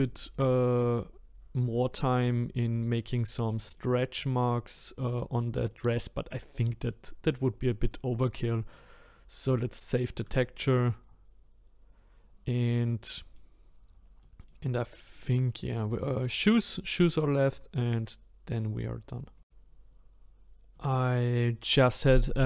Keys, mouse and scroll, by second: 2.4-3.8 scroll up 1, 3.8 middle click, 4.4-4.7 scroll down 2, 4.7-7.8 middle drag, 7.8-9.1 drag, 9.1-9.9 scroll down 1, 9.9-10.4 scroll down 1, 10.4 shift+middle click, 11.0-11.7 scroll up 1, 11.7-12.7 scroll down 2, 13.0 middle click, 13.6-14.2 scroll down 1, 14.2-17.3 middle drag.